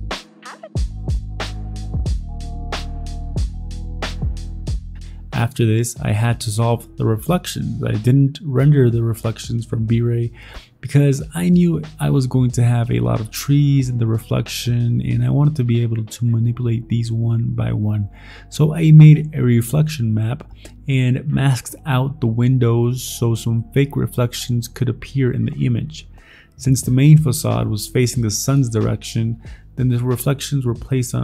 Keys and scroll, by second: 0.7 ctrl+t, 1.5 ctrl+d, 2.4-3.7 typing, 4.1 ctrl+t, 4.6 ctrl+t, 5.1 ctrl+f, 5.2 ctrl+f, 7.6 ctrl+j, 7.7 ctrl+t, 8.5 m, 8.7 Delete, 8.8 ctrl+d, 8.9 v, 9.2 ctrl+j, 9.5 Escape, 10.1 ctrl+t, 10.7 Escape, 10.9 ctrl+t, 11.1 ctrl+t, 11.4 ctrl+j, 11.8 ctrl+z, 12.1 ctrl+t, 12.4 alt+Tab, 12.6 alt+Escape, 12.7 alt+Tab, 13.1 ctrl+t, 13.7 ctrl+t, 13.8 ctrl+t, 14.1 alt+Tab, 15.2 alt+Tab, 15.8-17.4 typing, 17.5 ctrl+d, 17.9 ctrl+z, 18.4 ctrl+j, 18.8 ctrl+a, 18.9 ctrl+d, 19.0 ctrl+d, 19.3 ctrl+c, 19.6 ctrl+v, 19.6 ctrl+i, 19.8 ctrl+d, 21.2 ctrl+z, 21.6 ctrl+a, 21.9 ctrl+a, 21.9 ctrl+c, 22.5 ctrl+c, 22.6 ctrl+c, 22.9 ctrl+i, 22.9 ctrl+i, 24.6 shift+e, 27.2 v, 29.0 ctrl+z.